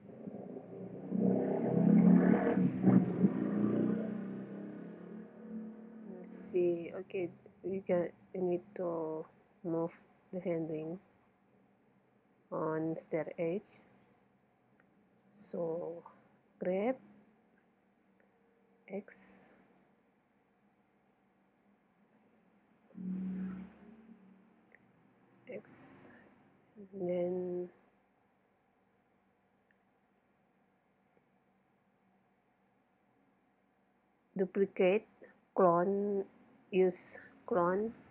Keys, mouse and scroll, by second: 3.6-6.1 middle drag, 6.1 z, 10.9-16.6 middle drag, 14.2 z, 16.6 g, 21.6-23.4 drag, 22.5 g, 24.5-26.4 drag, 26.4-27.9 middle drag, 27.9-29.6 drag, 30.4-34.9 middle drag, 34.9-36.6 drag.